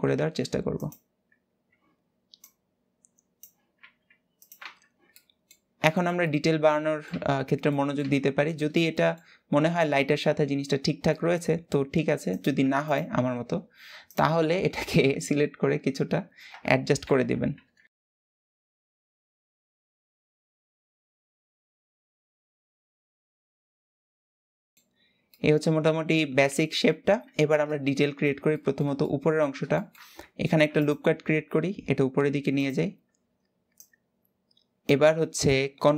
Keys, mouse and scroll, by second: 2.1 click, 3.5 s, 4.3 Tab, 4.5 scroll down 2, 4.8 middle click, 5.4 scroll down 2, 5.6-6.8 shift+middle drag, 6.8 Tab, 7.4 middle click, 7.7 Tab, 7.9-8.2 scroll down 3, 8.2-9.0 middle drag, 9.0-9.5 scroll up 2, 9.5-10.9 middle drag, 10.9-12.0 scroll up 2, 10.9 Tab, 12.0 click, 12.5 alt+shift+click, 13.7 alt+shift+click, 16.8 alt+z, 17.9 c, 18.5 alt+z, 18.6 middle click, 18.9 click, 19.3 scroll down 2, 19.4 middle click, 19.7 click, 20.1 Tab, 20.2 middle click, 20.3 Tab, 20.4 scroll up 1, 20.5 click, 21.4 scroll up 1, 21.5 middle click, 21.8 alt+shift+click, 21.9 middle click, 22.2 click, 22.7 scroll down 1, 22.8 shift+middle click, 22.9 alt+a, 23.2 alt+z, 23.3 b, 23.7 click, 24.0 alt+z, 24.1 Tab, 24.2 scroll down 1, 24.3 middle click, 24.7 scroll up 2, 25.0-26.9 middle drag, 26.9 Tab, 27.7-30.1 shift+middle drag, 30.1 ctrl+r, 32.7-33.5 scroll up 1, 33.5 click.